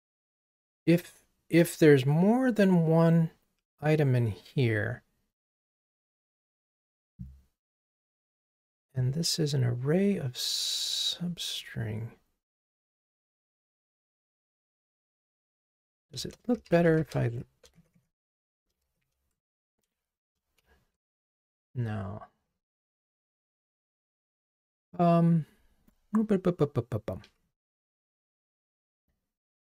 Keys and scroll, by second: 21.0 super+z, 21.7 super+z, 22.6 super+z.